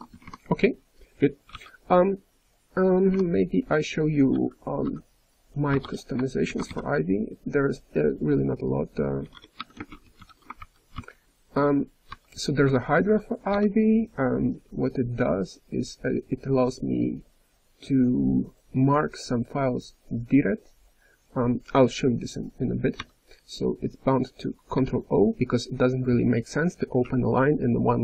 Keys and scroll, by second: 0.1 d, 1.5 ν, 5.4-6.3 typing, 10.6 ctrl+n, 10.9 Return, 12.0 j, 12.6 d, 13.5 f, 16.5 h, 22.9 j, 24.7 d.